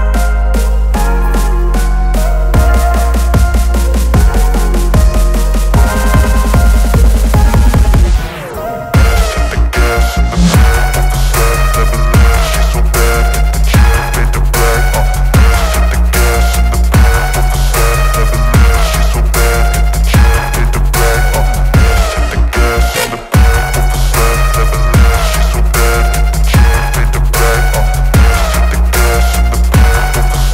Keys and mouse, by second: 0.4-1.7 shift+drag, 2.0 ctrl+space, 2.9 click, 3.4 shift+click, 6.5 click, 6.6 ctrl+space, 6.7 ctrl+alt+click, 7.9 click, 8.9 space, 9.0 click, 9.1 space, 10.5 ctrl+y, 11.2 click, 11.6 alt+click, 12.8 ctrl+y, 13.0 space, 13.1 click, 13.3 space, 14.3 click, 16.5 click, 19.1 click, 22.9-25.8 alt+shift+drag, 27.9 click, 27.9 click, 29.8 click.